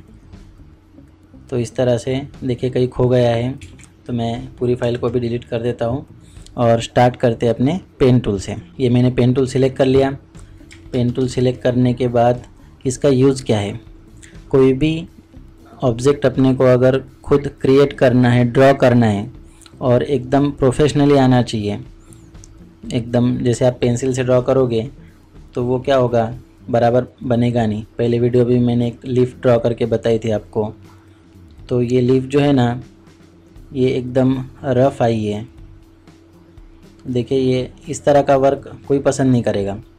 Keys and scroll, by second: 1.2 ctrl+space, 2.1-3.0 typing, 3.6 ctrl+space, 10.6 ctrl+space, 10.9 ctrl+KP_Add.